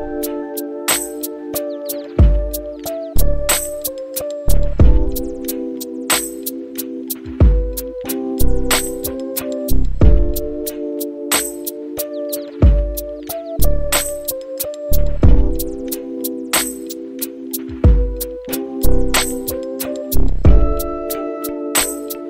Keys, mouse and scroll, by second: 2.2 click, 4.5 shift+d, 10.8-18.6 drag, 18.9-20.2 scroll down 4, 20.4-22.2 drag.